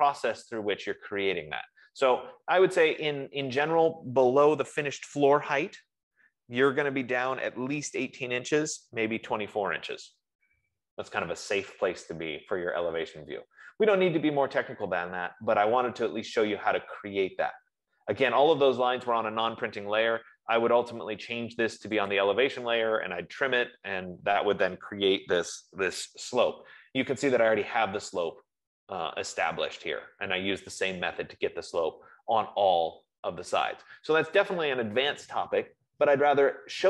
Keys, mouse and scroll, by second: 2.3-2.6 scroll, 3.8-4.4 scroll, 13.4-18.5 middle drag, 18.6-20.8 middle drag, 20.8-21.8 scroll, 22.4 click, 22.9 F15, 27.4-27.7 scroll, 30.3-30.8 scroll, 31.9-32.2 scroll, 34.8-36.8 middle drag.